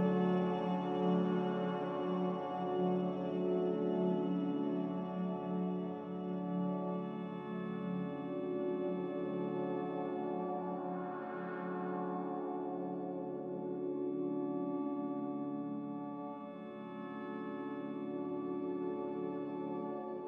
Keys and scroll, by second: 2.7 m, 4.8 n, 6.6 b, 7.8 n, 10.6 a.